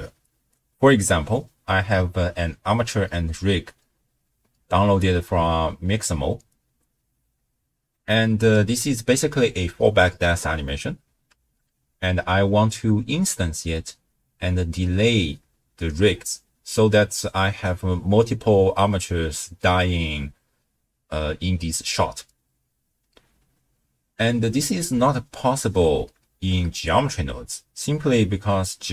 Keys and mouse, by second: 7.9 click, 7.9 right click, 8.6 space, 11.4 space, 11.9 space, 12.4 shift+space, 23.3 space, 25.7 space, 26.3 shift+space.